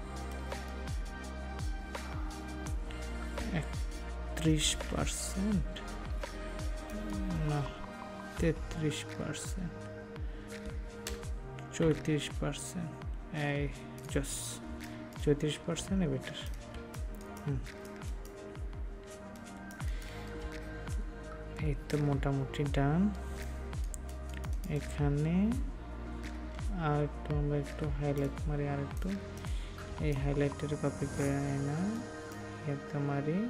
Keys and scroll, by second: 16.7 ctrl+space.